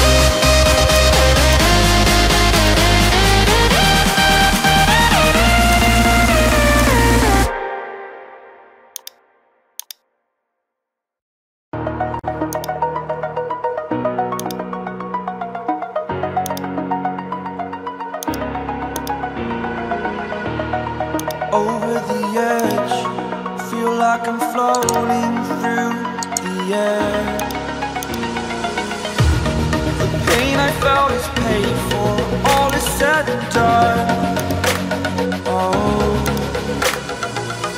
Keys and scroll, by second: 8.5 ctrl+z.